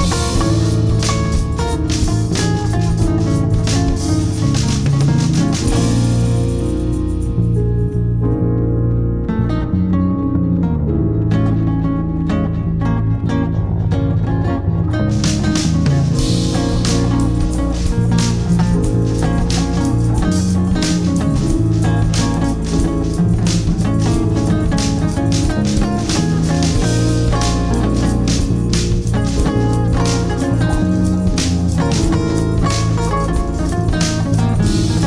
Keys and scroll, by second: 3.7 alt+c, 3.8 alt+w, 4.3 p, 8.2 shift+F2, 8.6 F3, 9.3 F2, 10.4 F6, 10.7 Escape, 15.5 space, 16.5 c, 16.8 space, 17.0 Escape, 18.6 F3, 20.8 Delete, 21.5 ctrl+z, 22.1 Escape.